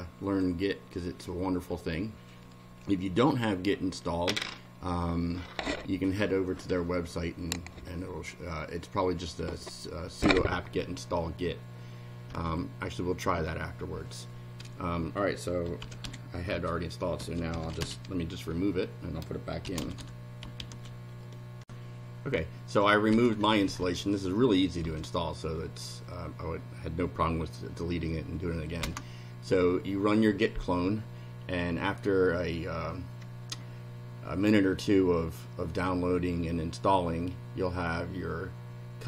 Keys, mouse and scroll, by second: 0.2 click, 12.3 Return, 15.4-18.2 typing, 19.4-21.1 typing, 21.6 ctrl+r, 23.1 Up, 24.8 Up, 28.8 Return.